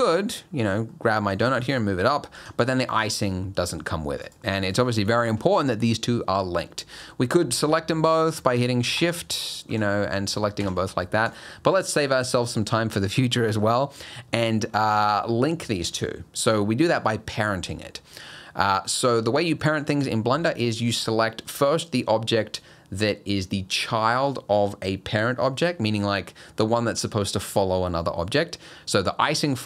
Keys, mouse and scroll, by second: 0.9 middle click, 1.5 g, 4.2 click, 4.6 click, 5.2 shift+click, 8.6 click, 9.0 shift+click, 9.7 g, 11.3 click, 13.4 middle click, 13.7-15.4 scroll up 1, 18.3 middle click.